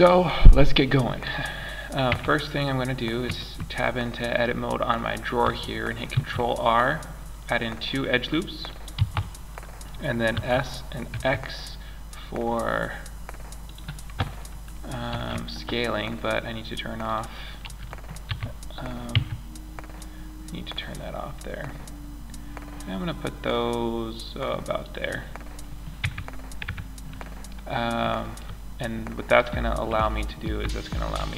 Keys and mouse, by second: 1.4 Tab, 5.5 ctrl+r, 9.7 s, 14.4 ctrl+z, 17.6 s, 25.4 Tab, 26.0 Tab.